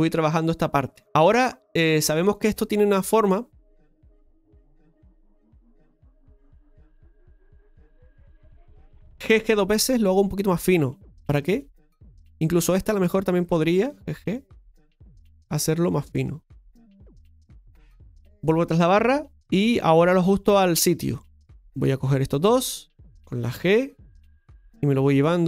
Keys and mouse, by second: 4.3 middle click, 5.5 KP_Divide, 10.5 g, 11.2-12.3 right drag, 12.3 g, 13.1-15.0 right drag, 15.0 g, 16.0-17.3 right drag, 17.3 g, 18.1 KP_Divide, 21.3-22.3 shift+middle drag, 22.3 shift+right click, 25.3 g.